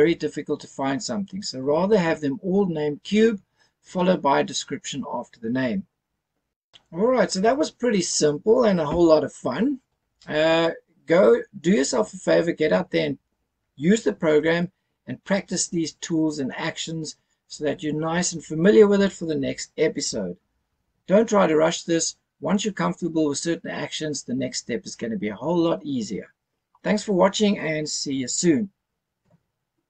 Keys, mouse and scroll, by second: 6.5 F10.